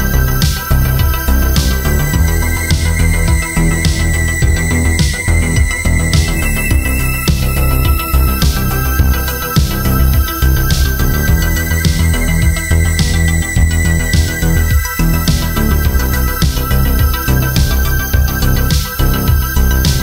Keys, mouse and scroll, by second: 0.2 alt+click, 0.6 alt+click, 1.1 click, 3.8 click, 8.1 right click, 8.4 click, 12.4 click, 13.0 Escape, 13.4 click, 15.7 click, 17.6 click, 17.7 Escape, 19.8 click.